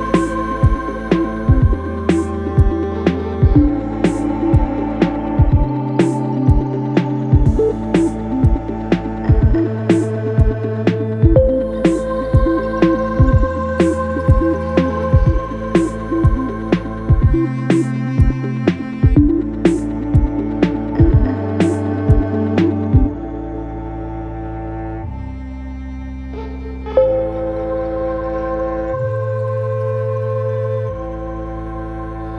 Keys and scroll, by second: 0.4 Return, 22.8 9, 23.2 0, 23.4 Return, 24.2 1, 24.4 Return, 27.5 ctrl+z.